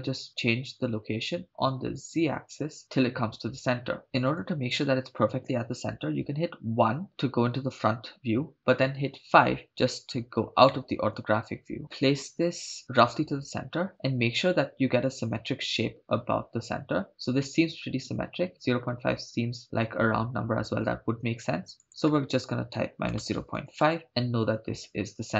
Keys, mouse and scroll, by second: 0.7-4.0 drag, 4.4 KP_1, 6.8 KP_1, 9.3 KP_5, 10.7-12.8 shift+middle drag, 19.3-23.8 shift+drag.